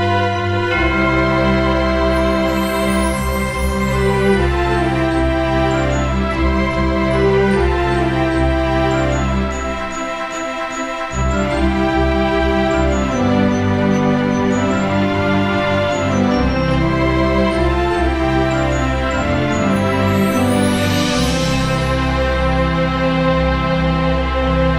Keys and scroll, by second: 1.5 Delete, 1.8 ctrl+d, 20.5 Delete, 20.8 ctrl+d, 21.4 space.